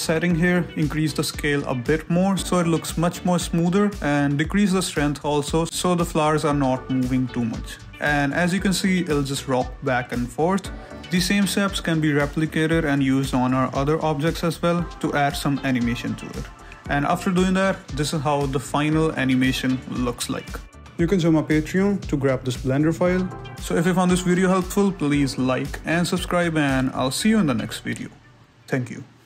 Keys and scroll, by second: 0.5 shift+space, 8.4 shift+space, 18.3 i.